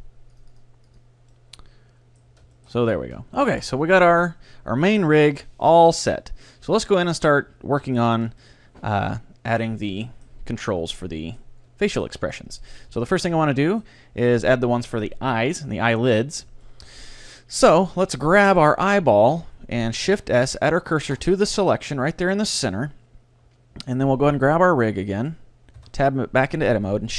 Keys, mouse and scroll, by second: 0.4-2.7 drag, 1.4-6.0 middle drag, 2.9 a, 3.4 ctrl+s, 7.3-8.9 right drag, 7.5-15.2 middle drag, 15.8 KP_3, 16.7-20.2 middle drag, 18.0-19.8 right drag, 18.8 z, 20.2 shift+s, 21.7-24.2 middle drag, 24.5-27.1 right drag, 25.8 Tab.